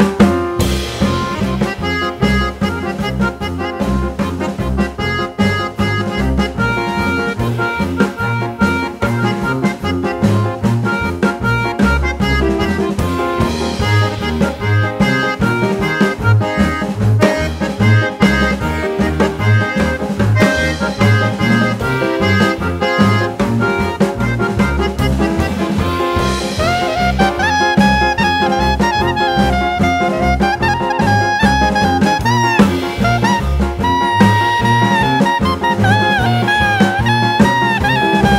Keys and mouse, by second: 1.9 click, 2.9 click, 4.5 click, 8.2 click, 9.3 click, 11.0 click, 12.2 click, 14.3-16.6 drag, 17.6-19.0 drag, 20.2 g, 22.7 click, 24.2-25.8 drag, 27.9 click, 29.1 click, 30.2-32.1 drag, 33.4-36.2 drag.